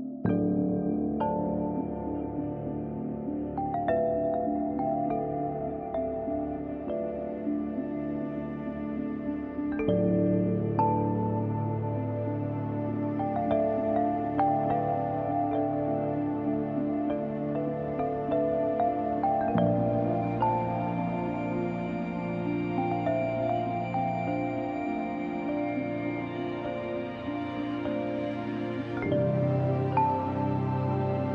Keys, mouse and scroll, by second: 0.7 space, 0.9 click, 1.2 space, 1.5 click, 3.5-7.9 drag, 8.1-11.0 drag, 14.1-19.2 drag, 23.1-30.3 drag.